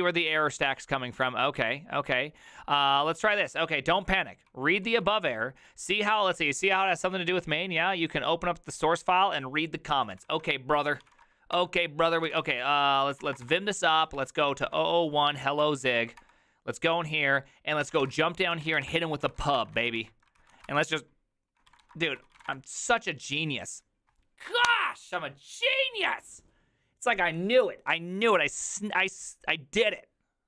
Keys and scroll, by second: 4.6-6.6 typing, 10.1 ctrl+c, 10.2 ctrl+c, 10.4-11.7 typing, 12.2 ctrl+c, 12.9-15.2 typing, 14.0 ctrl+p, 15.6 Down, 15.9 Down, 16.2 Return, 17.6-23.0 typing, 20.5 ctrl+a.